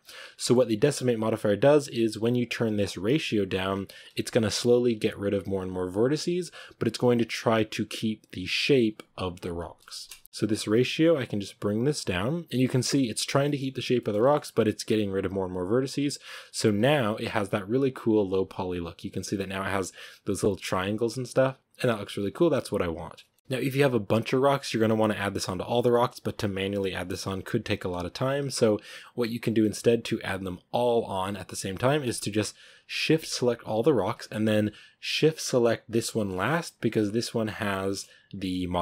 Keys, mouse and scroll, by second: 0.3 shift+middle drag, 0.6-1.1 scroll up 1, 10.8-12.6 drag, 12.6 shift+middle click, 12.9-13.3 scroll up 2, 13.3-13.6 shift+middle drag, 13.6 scroll up 1, 13.9-15.3 shift+middle drag, 15.3-18.2 drag, 19.6-21.5 scroll up 1, 21.5 scroll up 1, 21.7 click, 22.3 scroll down 3, 22.4-23.4 middle drag, 23.4 scroll down 2, 24.1-24.5 scroll down 2, 25.8-28.0 middle drag, 28.0-29.9 scroll up 1, 29.9-30.5 scroll up 1, 30.5-31.9 scroll up 1, 31.9-35.7 right drag, 35.7 scroll up 1, 36.0-36.7 shift+middle drag, 36.7-37.4 scroll up 1, 37.4 scroll up 1, 37.7-38.8 shift+middle drag.